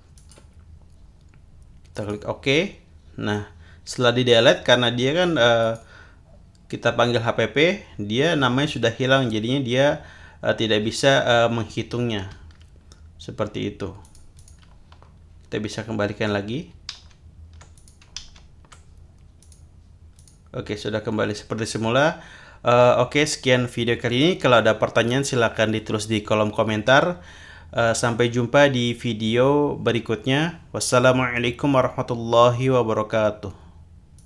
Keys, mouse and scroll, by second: 0.1 click, 1.9 click, 5.6 click, 14.0-14.7 drag, 16.9 ctrl+z, 17.8 ctrl+click, 18.2 ctrl+z, 19.4 click, 20.2 click, 34.2 click.